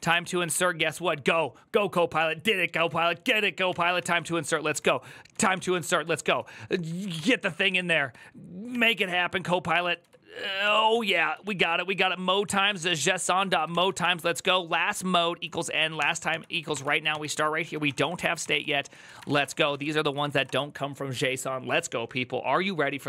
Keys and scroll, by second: 0.0-0.2 typing, 2.5 typing, 3.4 Tab, 3.7-14.1 typing, 5.1 Tab, 6.6 Tab, 6.9 ctrl+c, 8.5 Tab, 8.7 ctrl+c, 10.4 Tab, 10.7 ctrl+c, 13.2 Tab, 15.2-20.6 typing, 18.2 ctrl+c.